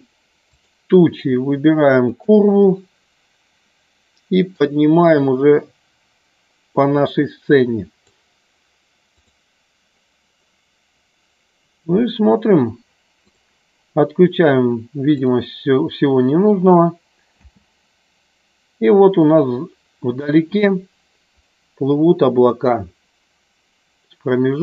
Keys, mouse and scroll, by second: 0.4 click, 2.1 shift+click, 4.5-8.1 drag, 9.1 click, 15.1 click, 17.5 space.